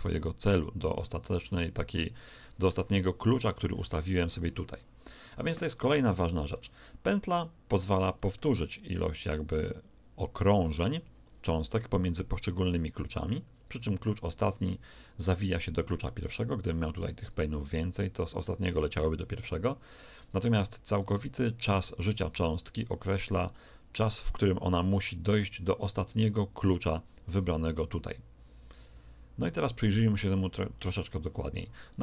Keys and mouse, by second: 3.7-6.0 middle drag, 8.1-11.0 drag, 17.1-19.6 right drag, 20.9 right click, 26.6 right click, 31.9 right click.